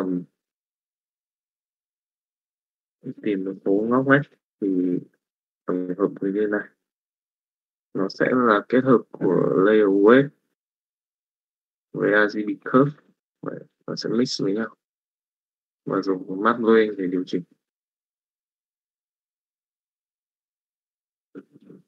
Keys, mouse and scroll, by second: 0.6-1.7 drag, 2.8 middle click, 3.9 click, 4.9 middle click, 6.6 middle click, 8.2 middle click, 9.1 middle click, 10.4 middle click, 13.2 middle click, 16.9 middle click, 19.1 middle click, 19.8 middle click, 21.1 click.